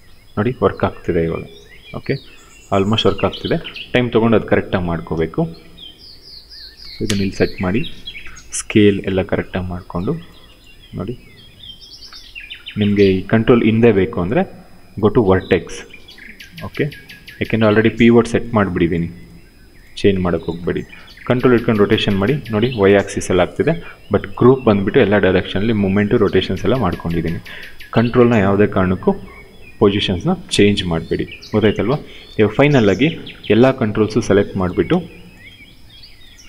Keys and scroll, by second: 3.0 ctrl+z, 6.5 space, 7.9 r, 16.0 w, 20.6 e, 23.0 ctrl+z.